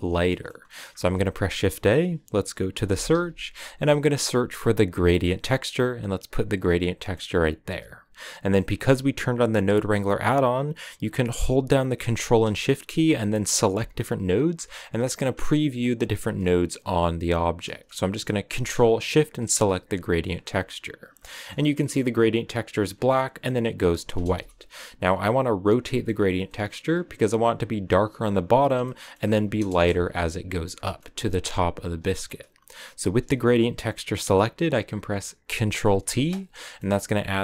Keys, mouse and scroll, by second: 13.7 ctrl+shift+click, 14.5 ctrl+shift+click, 15.3 ctrl+shift+click, 15.6 ctrl+shift+click, 16.0 ctrl+shift+click, 16.7 ctrl+shift+click, 17.4 ctrl+shift+click, 18.9 ctrl+shift+click, 19.2 ctrl+shift+click, 21.1 middle click, 21.5 scroll up 4, 21.7-22.9 middle drag, 22.9 scroll down 2, 23.0-24.3 middle drag, 24.3 KP_0, 26.4 middle click, 26.8-27.2 scroll up 4, 28.8 middle click, 29.7 KP_0, 30.8-36.0 shift+middle drag, 36.0 ctrl+t, 36.9 a.